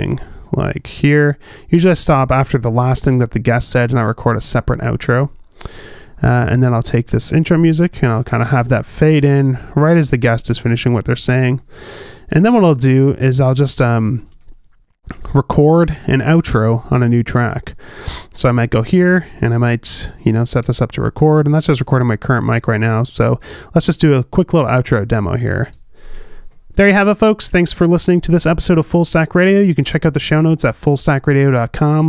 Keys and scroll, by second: 28.0 space.